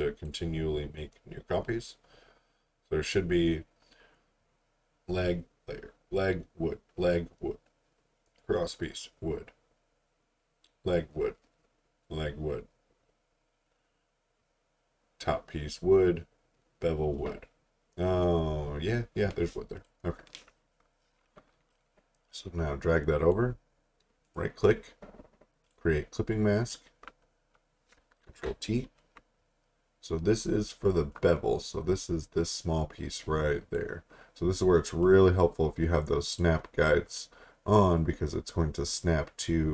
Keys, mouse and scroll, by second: 1.0-2.7 scroll up 1, 2.7 scroll down 1, 8.7-9.4 scroll up 1, 19.8 click, 25.4 right click, 25.6 click, 28.3 t, 31.1 click.